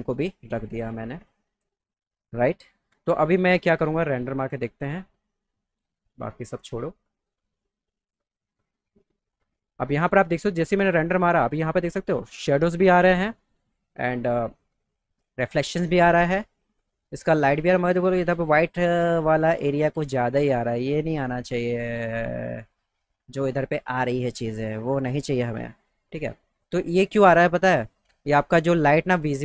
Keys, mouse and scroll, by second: 0.0 click, 1.6 right click, 2.9 w, 6.4 click, 9.9 click, 16.4 middle click, 21.0 middle click, 26.0 click.